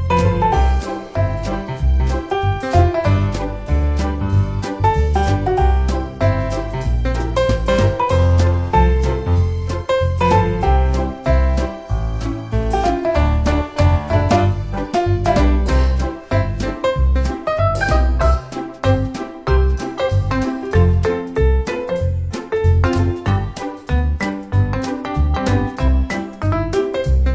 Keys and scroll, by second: 11.9 super+c, 12.1 super+v.